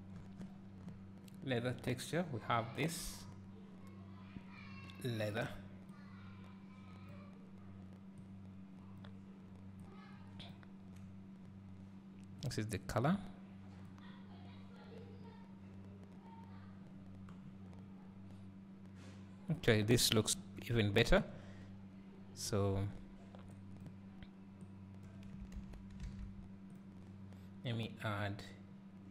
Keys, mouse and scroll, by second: 0.7-7.5 drag, 8.2-12.6 drag, 14.2-20.4 drag, 16.8 scroll down 2, 20.4 Delete, 22.5-26.1 drag, 26.1 alt+a, 26.8 click.